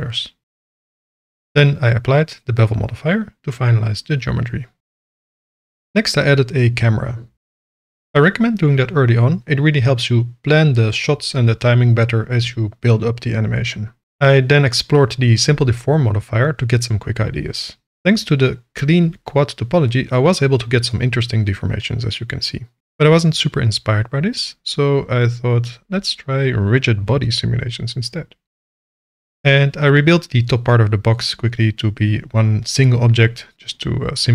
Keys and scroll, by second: 2.6 ctrl+a, 4.1 ctrl+a, 5.2 shift+a, 6.9 ctrl+alt+KP_0, 7.7 ctrl+v, 9.4 space, 10.0 v, 10.6 s, 10.7 KP_1, 11.0 KP_Enter, 12.9 KP_0, 31.9 alt+e, 32.9 s.